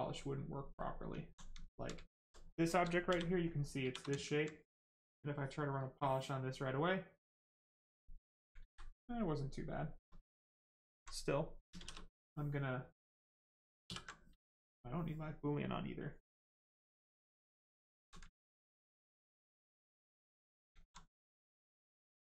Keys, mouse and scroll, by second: 0.7 click, 1.2 alt+right click, 1.5 alt+right click, 2.8 shift+right click, 3.0 shift+f, 3.8 shift+f, 4.2 alt+right click, 5.3 click, 5.4 click, 7.8 right click, 8.6 ctrl+z, 9.1 right click, 10.6 alt+click, 11.7 shift+f, 17.1 alt+click, 18.4 alt+click, 19.2 alt+click, 20.0 alt+click, 20.7 alt+right click.